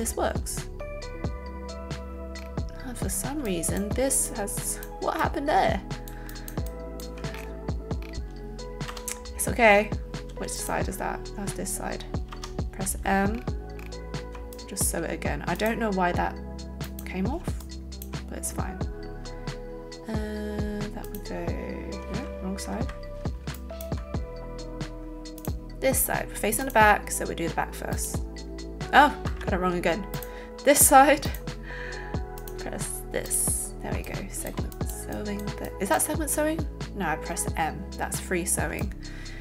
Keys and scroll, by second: 8.8 m, 10.2 a, 22.7 Escape, 23.3 alt+Escape, 29.3 Escape.